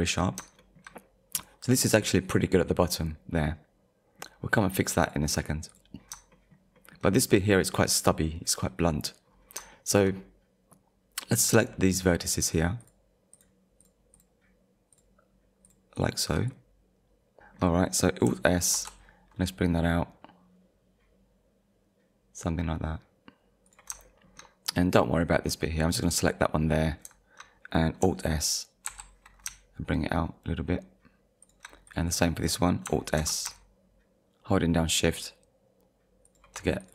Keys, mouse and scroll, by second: 0.2-0.6 scroll up 2, 0.6 shift+middle click, 1.7-2.0 scroll up 1, 2.0 middle click, 3.4 middle click, 5.0 click, 5.7 click, 6.0-6.3 scroll down 2, 6.3 shift+middle click, 6.8 shift+middle click, 9.3 scroll down 1, 9.7 shift+middle click, 10.2 middle click, 11.3 click, 11.7 shift+middle click, 12.8 shift+click, 13.3 shift+click, 14.9 shift+click, 15.7 shift+click, 16.5 middle click, 17.1 shift+scroll down 1, 17.5 shift+middle click, 18.7 alt+s, 23.7 click, 24.1 shift+middle click, 25.5 middle click, 28.9 alt+s, 31.4 shift+click, 33.2 alt+s, 36.3 shift+click, 36.8 click.